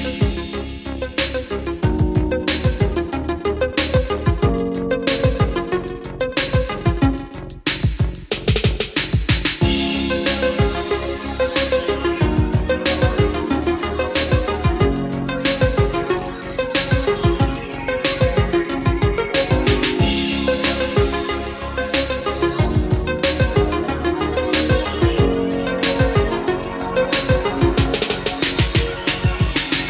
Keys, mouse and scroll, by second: 0.4-8.7 drag, 16.0-16.3 scroll down 1, 17.1-21.1 scroll up 1, 21.1-22.9 drag, 23.4 Escape, 24.6-29.8 drag.